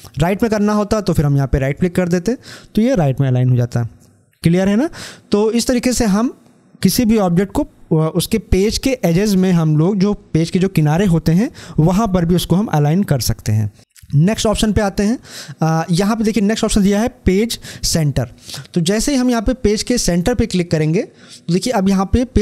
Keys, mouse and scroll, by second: 1.3 click, 19.8 click.